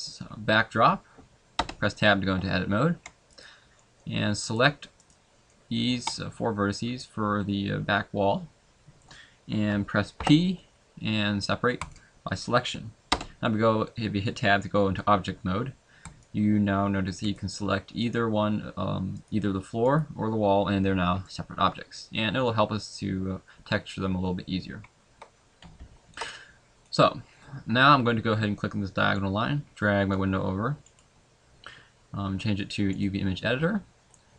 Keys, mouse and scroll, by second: 1.6 Tab, 3.3 shift+right click, 3.8 shift+middle click, 4.5 shift+right click, 5.1 shift+right click, 5.5 shift+middle click, 10.2 p, 13.1 Tab, 16.0 right click, 17.3 right click, 18.0 right click, 19.2 right click, 20.0 right click, 21.3 middle click, 23.8 middle click, 24.8 scroll up 1, 25.8 ctrl+s, 29.1 click.